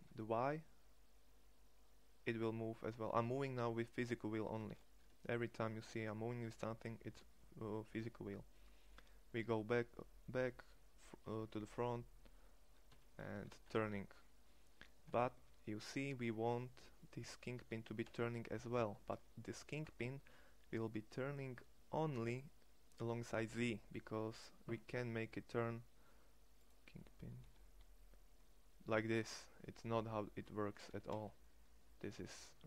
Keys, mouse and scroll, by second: 5.0 r, 13.3 r, 17.8 r, 27.3 r.